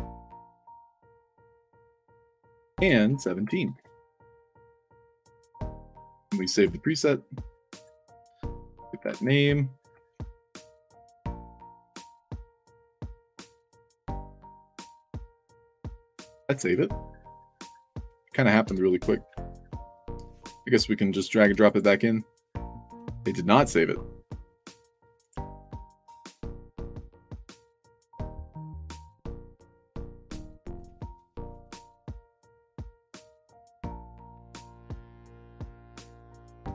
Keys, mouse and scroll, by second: 0.0 click, 0.7 click, 1.0 click, 1.3 ctrl+v, 2.3 click, 2.7 ctrl+v, 3.6 1, 5.1 middle click, 5.4 d, 6.5 click, 7.7 click, 8.1 scroll up 2, 8.4 click, 9.9 ctrl+c, 10.3 click, 11.1 click, 11.3 ctrl+v, 12.1 click, 13.0 click, 13.3 ctrl+v, 13.6 click, 20.2 click, 20.4 click, 21.4 i, 21.6 click, 22.1-22.5 scroll up 4, 24.8 drag, 25.5 ctrl+z, 25.9 ctrl+z, 26.3 ctrl+z, 26.8 ctrl+z, 27.9-28.4 scroll up 4, 30.7 click, 31.5 click, 31.7 ctrl+v, 32.5 click, 33.4 click, 33.8 ctrl+v, 34.3 click.